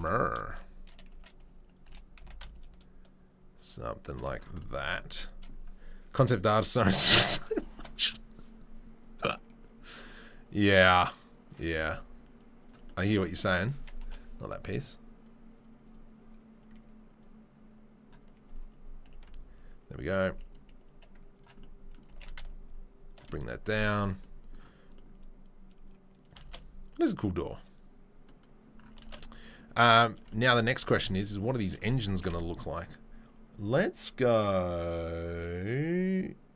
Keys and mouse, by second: 1.1 s, 1.8 g, 10.1-11.5 drag, 11.5-15.2 middle drag, 11.7 s, 14.0 Delete, 15.2 click, 15.3 middle drag, 15.5 drag, 15.6 middle click, 15.9 click, 16.0-16.3 middle drag, 16.3-17.2 drag, 17.2-25.8 middle drag, 19.0 g, 20.2 s, 22.0 g, 25.8-30.9 right drag, 26.4 shift+space, 29.0 shift+space, 30.9-36.5 middle drag, 32.0 g.